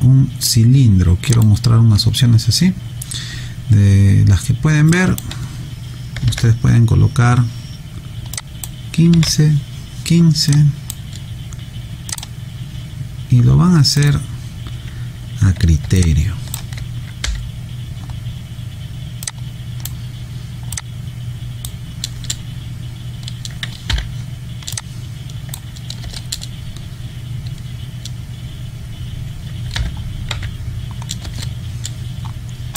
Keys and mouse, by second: 1.3 click, 4.9 click, 6.2 1, 7.9 5, 8.4 click, 9.1 1, 9.9 5, 10.5 click, 16.0 alt+click, 19.3 click, 24.0 r, 24.7 click, 26.0 space, 29.8 f.